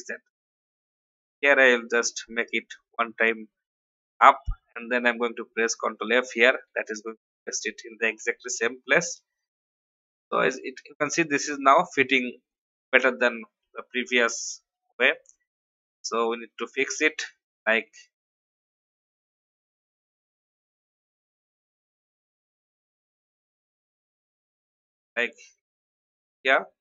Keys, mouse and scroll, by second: 0.1-1.3 drag, 1.7 shift+Up, 3.6 v, 3.9 click, 4.6 ctrl+f, 6.6 Up, 6.9 Up, 7.1 Up, 8.2 Up, 9.3 Down, 9.5 Down, 10.7 Up, 11.5 click, 15.2 shift+Up, 15.9 shift+Up, 18.3 click, 22.9 shift+Right, 23.8 shift+Left, 24.0 shift+Left, 24.2 shift+Left, 24.4 shift+Left, 26.3 click.